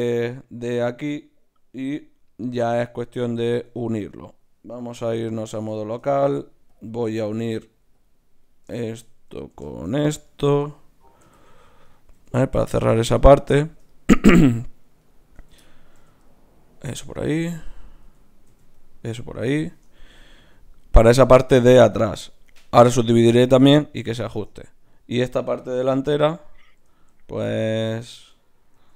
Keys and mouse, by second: 1.8 KP_Divide, 3.6 ctrl+Tab, 5.0 KP_Divide, 6.3 ctrl+Tab, 7.4 ctrl+Tab, 8.4-11.2 drag, 11.2 f, 11.8 click, 12.1 f, 15.0-16.8 drag, 15.4 f, 15.9 f, 17.5 click, 18.0 f, 18.5 f, 18.8 click, 25.8 KP_Divide, 28.7 ctrl+r.